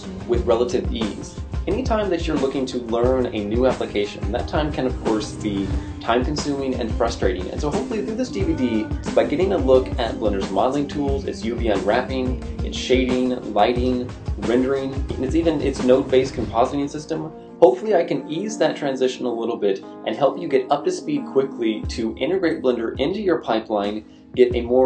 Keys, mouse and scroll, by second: 0.2 right click, 0.2-5.2 typing, 0.4 right click, 1.1 right click, 1.1 shift+middle click, 1.1 scroll up 3, 1.6 right click, 2.0 shift+middle click, 2.1 right click, 2.6 right click, 2.8 right click, 3.0 right click, 3.0 shift+middle click, 3.1 right click, 3.5 shift+middle click, 3.5 scroll down 3, 3.7 right click, 4.1 right click, 4.4 right click, 4.4 shift+middle click, 4.7 right click, 5.1 shift+middle click, 5.1 scroll down 2, 5.6 scroll up 1.